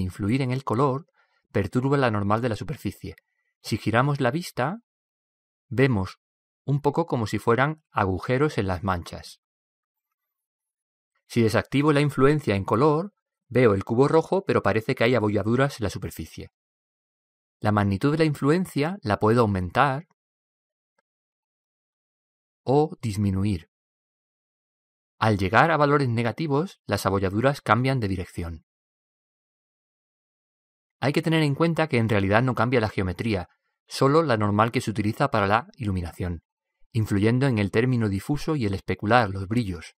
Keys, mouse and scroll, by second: 0.2-3.2 middle drag, 5.5-7.8 middle drag, 10.6-12.4 middle drag, 13.9-15.5 drag, 14.7-16.5 middle drag, 20.0-21.7 drag, 34.3-36.2 middle drag, 37.7-39.4 drag, 39.8-40.0 middle drag.